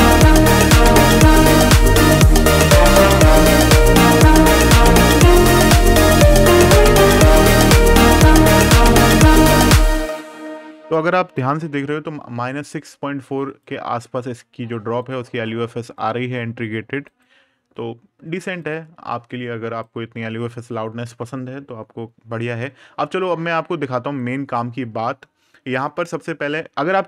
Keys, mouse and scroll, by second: 1.0 super+KP_Add, 3.8 super+KP_Subtract, 6.0 super+KP_Add, 7.1 super+KP_Subtract, 9.0 click, 13.0 click, 16.8 click, 21.4 scroll down 1, 21.9-22.9 scroll up 1, 23.9 right click.